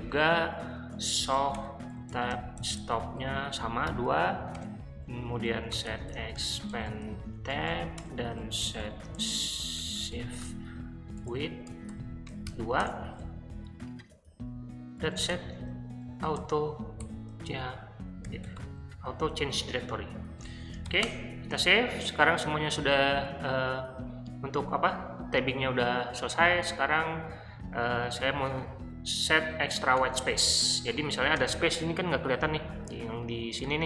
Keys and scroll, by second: 1.0-3.9 typing, 4.5 Return, 5.3-9.3 typing, 11.1-12.9 typing, 14.8-19.1 typing, 20.2 Escape, 20.3-21.1 typing, 29.5 o, 30.0 Return, 31.3 space.